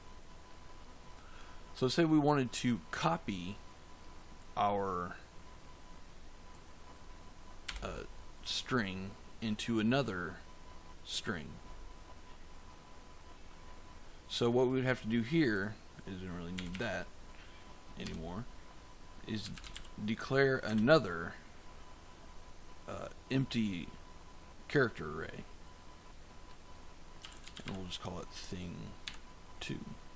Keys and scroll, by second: 7.6 BackSpace, 16.4 BackSpace, 17.9 Down, 19.1-20.6 typing, 26.9-28.9 typing.